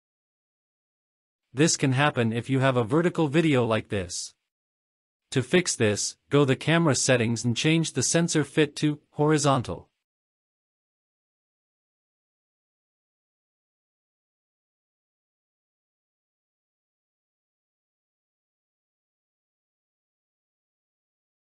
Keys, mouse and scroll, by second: 0.7-1.2 drag, 2.9-3.3 shift+middle drag, 4.3 click, 5.3-5.7 shift+middle drag, 6.0-6.5 scroll up 4, 6.8 space, 8.6 space, 9.5 click, 11.2 click, 14.1 click, 15.5-16.6 scroll down 7, 16.6-17.1 scroll up 2, 17.6 space, 18.0-18.8 scroll up 4, 19.4-20.0 scroll down 3, 20.6 scroll down 1.